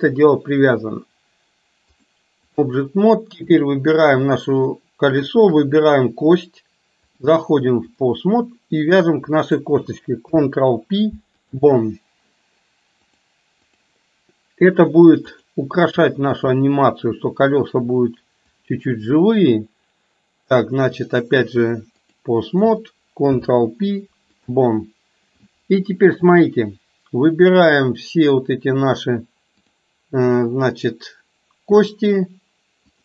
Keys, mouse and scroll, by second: 2.0 click, 3.4 click, 5.2 shift+click, 7.2-8.2 drag, 8.8 click, 13.1-14.0 drag, 15.4 click, 16.4 shift+click, 18.7-21.3 drag, 21.9 click, 23.3 ctrl+p, 27.5-28.5 drag, 29.6 click.